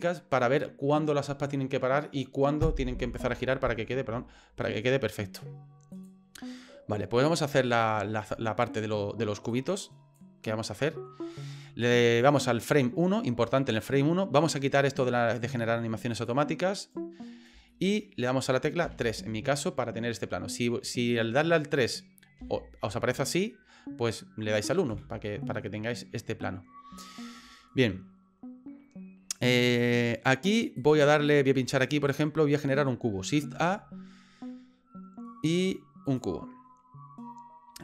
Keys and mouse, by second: 5.9 click, 7.6 middle click, 9.5 click, 10.7 middle click, 16.1 click, 16.8 right click, 17.8 shift+middle click, 18.8 KP_3, 20.6 shift+middle click, 22.4 KP_1, 24.9 KP_3, 27.0 middle click, 33.5 shift+a.